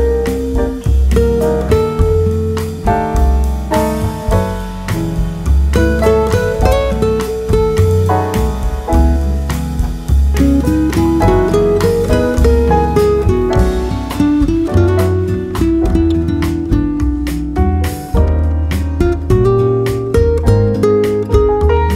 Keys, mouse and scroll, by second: 0.0 KP_0, 4.8 z, 5.9 shift+KP_0, 7.4 ctrl+KP_0, 8.5 Escape, 9.0 Escape, 9.8 ctrl+KP_0, 12.3-14.0 drag, 14.2 click, 14.6 middle click, 15.3 click, 15.4 middle click, 16.0 click, 16.2-17.3 right drag, 16.6 ctrl+KP_0, 17.9 middle click, 19.8-21.9 middle drag.